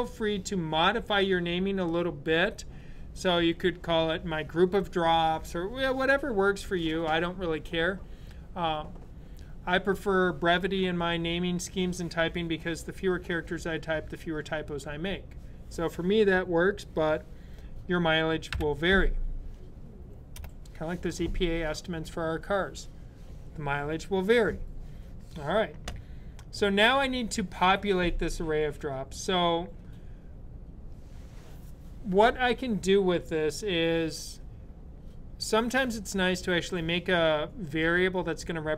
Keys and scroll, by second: 18.4 ;.